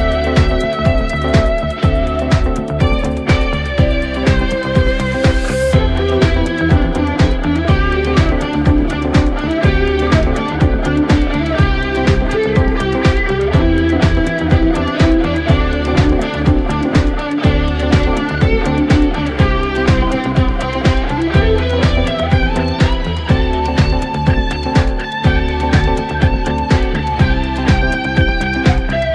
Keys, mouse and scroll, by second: 3.3 scroll down 1, 3.6-4.3 middle drag, 4.3 click, 5.1 ctrl+KP_7, 6.1-7.2 scroll up 2, 7.2 KP_1, 8.3-9.6 scroll up 3, 9.6-10.5 scroll down 4, 10.5-12.7 middle drag, 12.7-13.3 scroll up 1, 13.3-15.9 middle drag, 15.9-16.2 scroll up 3, 16.4-16.7 scroll down 2, 16.7-18.2 middle drag, 18.2 KP_1, 19.1-19.5 scroll up 2, 19.5 Tab, 20.6-21.0 scroll down 1, 21.0 Tab, 22.1 click, 22.5 scroll down 1, 22.8-24.5 middle drag, 24.5 s, 27.6 KP_7, 28.8 KP_1.